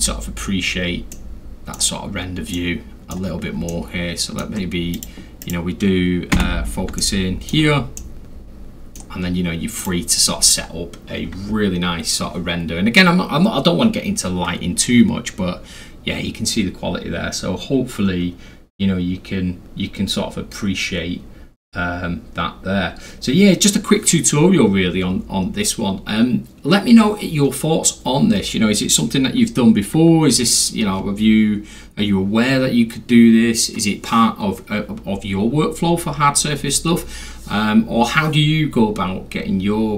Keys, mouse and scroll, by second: 0.5 scroll down 2, 0.7 scroll, 0.7 scroll down 2, 0.7-1.1 scroll, 1.1-1.7 middle drag, 2.5-3.1 middle drag, 3.6-4.4 alt+middle drag, 5.0 alt+click, 5.4 alt+click, 6.4 z, 7.0-7.5 alt+middle drag, 8.0-9.0 alt+middle drag, 9.8 click.